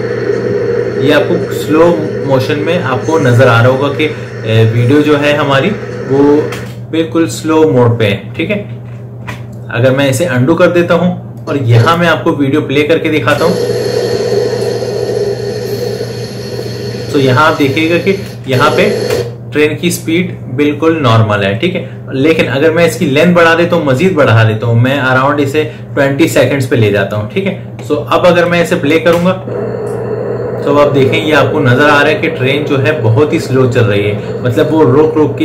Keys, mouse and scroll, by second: 6.3 space, 9.0 ctrl+z, 11.2-13.1 drag, 13.1 space, 18.3 space, 22.8-29.0 drag, 29.0 space.